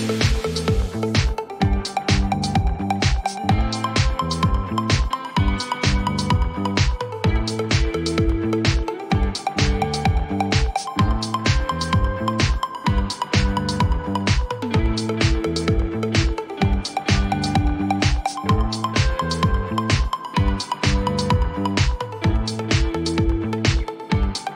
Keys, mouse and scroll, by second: 0.7 c, 1.9-2.3 typing, 4.6 click, 6.2 click, 7.0-8.0 typing, 9.2-10.0 typing, 11.2 click, 11.8-12.5 typing, 12.7 Return, 14.8 right click, 17.0 click, 19.5 click, 20.4 BackSpace, 22.8 click, 23.4-24.5 drag.